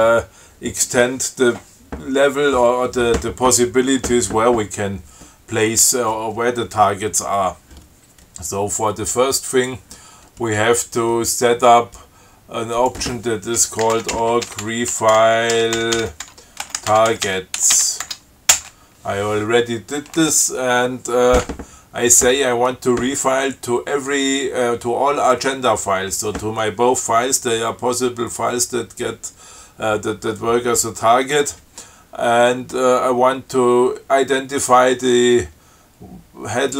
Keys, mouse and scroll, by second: 9.8 click, 13.0 click, 13.8-18.5 typing, 18.8 Return.